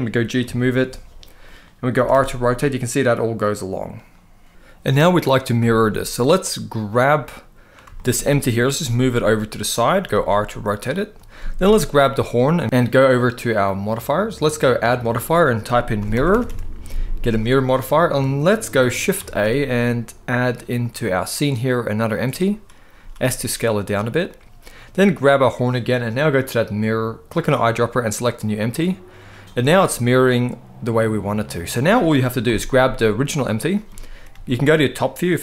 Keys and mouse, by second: 0.1 g, 1.1 right click, 1.7 r, 1.8 r, 5.4 shift+middle click, 6.6 click, 7.7 shift+middle click, 8.6 g, 9.4 click, 9.8 r, 12.6 shift+a, 14.4-17.2 drag, 16.1 r, 18.9 shift+a, 22.6 s, 24.9 click, 27.0 click, 29.2-31.2 middle drag, 32.2 KP_7, 33.1 click, 34.1 r.